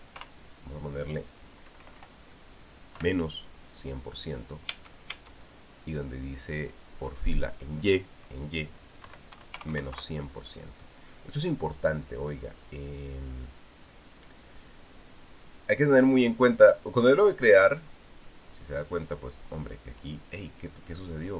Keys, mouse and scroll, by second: 0.7 KP_1, 1.0 KP_0, 2.5 Left, 3.8 KP_Subtract, 5.5 Tab, 9.9 KP_Subtract, 10.1 KP_1, 10.4 KP_0, 10.7 KP_Enter, 18.0 click, 20.4 click.